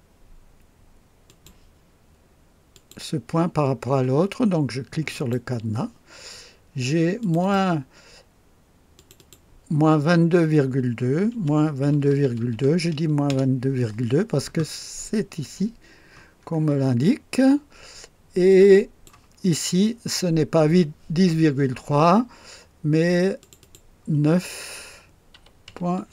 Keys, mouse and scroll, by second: 1.2 click, 2.7 click, 5.1 click, 7.2 click, 8.9 click, 11.3 KP_Subtract, 11.8-12.7 typing, 13.2 Return, 13.4 KP_Enter, 14.2 scroll down 1, 16.4-16.7 scroll up 1, 17.1 scroll down 1, 18.4-19.2 drag, 23.4 click, 25.3 KP_9, 25.6 ., 26.0 KP_8.